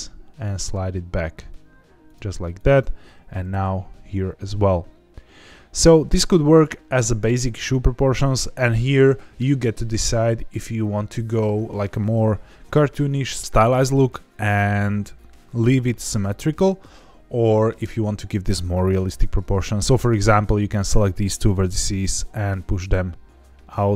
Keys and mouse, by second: 2.0 click, 2.5 click, 3.3 g, 3.4 g, 5.6 click, 19.1 1, 20.3 click, 21.7 g.